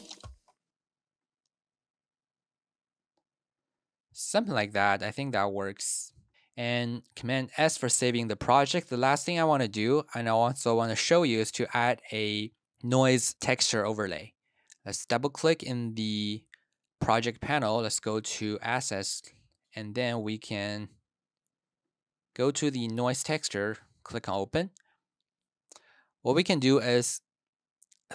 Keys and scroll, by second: 6.2 space, 7.0 super+s.